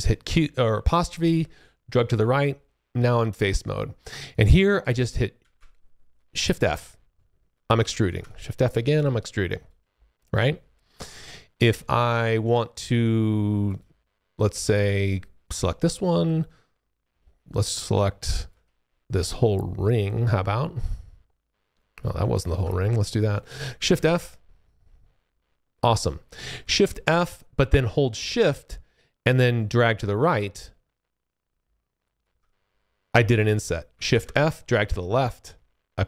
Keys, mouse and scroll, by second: 0.6 `, 4.2 click, 5.4 shift+f, 6.1 click, 8.0 shift+f, 8.2 click, 9.2 alt+click, 9.7 alt+middle click, 12.0 alt+click, 13.6 click, 16.7 shift+middle click, 17.1-17.7 shift+scroll up 1, 18.4 alt+click, 19.8 shift+middle click, 20.8 alt+click, 22.6 shift+click, 22.7 alt+middle click, 23.9 shift+f, 24.1 click, 27.0 shift+f, 29.6 shift+click, 34.1 shift+f, 34.6 click.